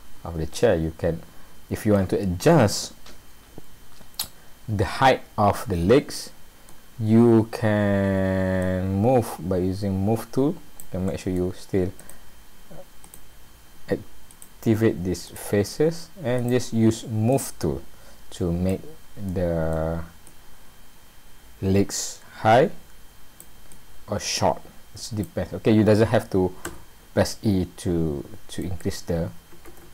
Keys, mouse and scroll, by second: 0.5 middle click, 2.6 middle click, 8.6 click, 11.1 middle click, 12.0 click, 13.0 click, 14.3 shift+click, 15.3 click, 16.4 shift+click, 17.3 click, 18.9-19.4 scroll down 2, 19.3 middle click, 20.3 click, 23.7 click, 26.7 e, 29.7 ctrl+z.